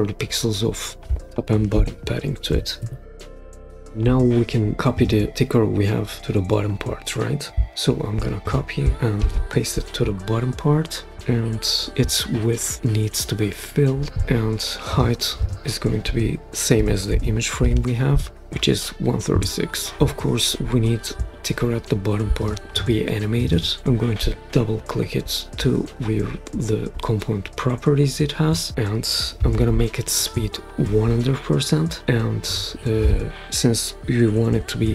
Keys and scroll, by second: 2.1-3.4 typing, 3.6 Return, 7.7 super+c, 9.2 super+v, 16.5-17.5 typing, 19.3 Return, 28.7-29.8 typing, 30.1 Return.